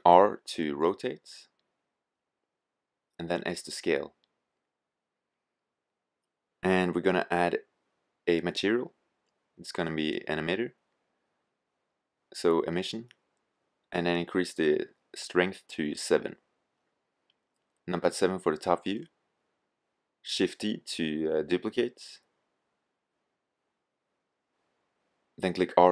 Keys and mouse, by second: 1.1 r, 2.5-2.8 drag, 2.8 s, 5.6-7.2 drag, 8.4-12.1 drag, 13.6-15.4 drag, 17.0 KP_7, 19.7 g, 21.1 click, 22.0 shift+d, 25.1-25.5 drag.